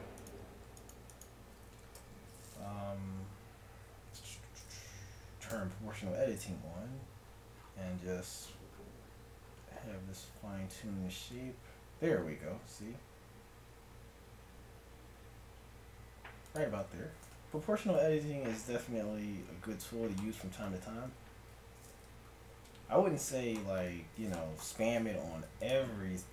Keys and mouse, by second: 1.9 KP_1, 5.5 o, 6.5 s, 17.2 a, 17.3 Tab, 21.1 Tab, 24.9 ctrl+Tab.